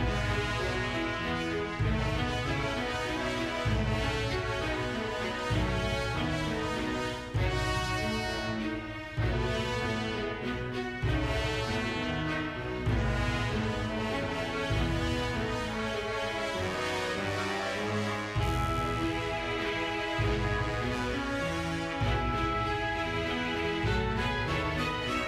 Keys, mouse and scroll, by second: 0.0 click, 0.2-0.5 scroll down 4, 0.4 shift+middle drag, 0.6 scroll up 1, 0.7 shift+middle drag, 1.3 scroll down 1, 1.4 middle click, 1.5 scroll up 1, 1.6 shift+middle drag, 1.9 click, 2.5 g, 3.0 right click, 3.2 g, 3.7 right click, 4.0 g, 4.2 y, 5.2 click, 5.5 r, 5.6 z, 6.6 click, 7.1 middle click, 7.3 shift+middle click, 7.8 r, 8.1 right click, 8.3-9.1 middle drag, 9.3 g, 9.9-10.3 drag, 10.9-11.3 drag, 11.7 shift+middle click, 11.9 click, 13.2 click, 14.4 click, 16.2 click, 17.1 click, 17.9 click, 18.3 scroll up 3, 18.5 shift+middle click, 18.8 drag, 18.9 click, 19.3 click, 20.1 click, 20.3 click, 22.1 a, 22.3 i, 22.7 space, 24.1 space, 24.6 click, 24.8 drag, 25.1 g.